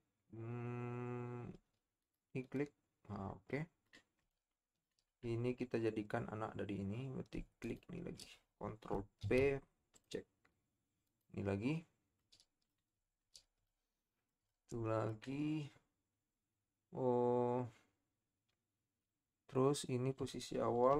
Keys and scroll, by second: 9.2 ctrl+p.